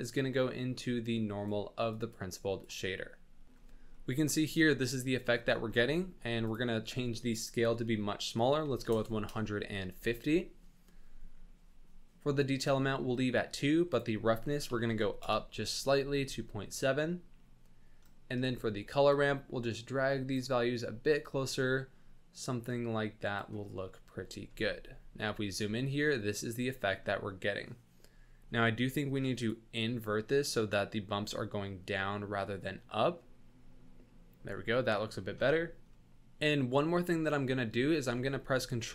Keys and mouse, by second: 1.9 click, 2.3 click, 2.4 click, 2.8 click, 3.9 click, 5.1 click, 6.4-9.4 drag, 13.9-15.3 drag, 18.0 middle click, 19.1-20.3 drag, 21.2-23.3 drag, 24.6-25.7 shift+middle drag, 27.0 middle click, 29.5 middle click.